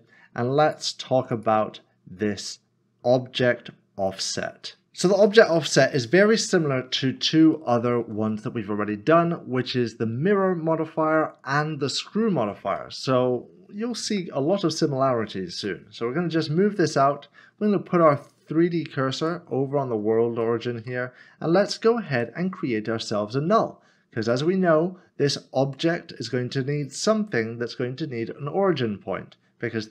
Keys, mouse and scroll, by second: 4.1 click, 6.2 middle click, 6.9 scroll up 1, 7.6 shift+middle click, 8.3 middle click, 15.6 typing, 17.6 s, 20.4 shift+middle click, 22.1 a, 26.9 click.